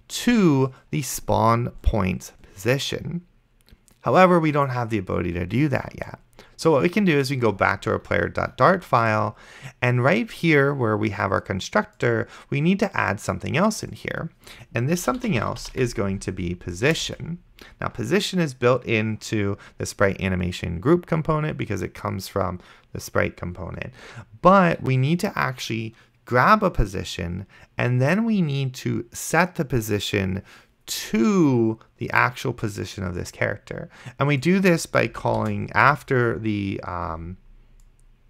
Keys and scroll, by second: 15.0-17.1 typing, 35.7 shift+;.